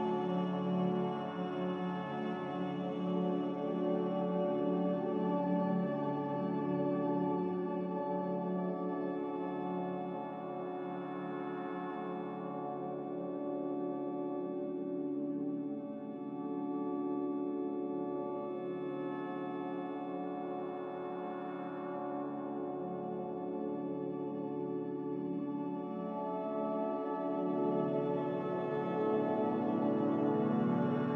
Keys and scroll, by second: 2.5-3.3 typing, 8.0 g, 9.8 Escape, 11.1 z, 14.5-15.4 typing, 19.9 5.